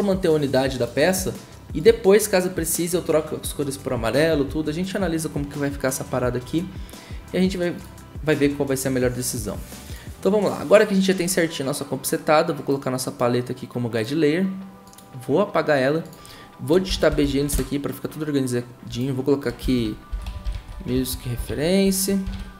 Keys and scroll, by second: 16.8-17.7 typing, 19.6 Return, 19.8-22.5 typing.